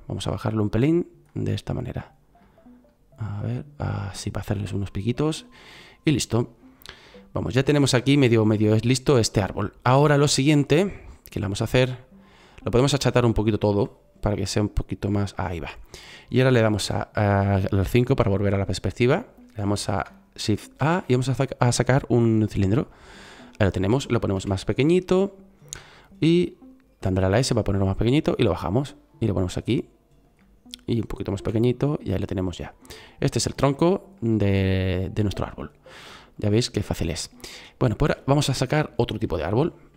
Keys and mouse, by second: 1.3-4.5 drag, 18.1 KP_5, 20.7 shift+a, 24.3 s, 31.3 s, 35.1-35.7 middle drag.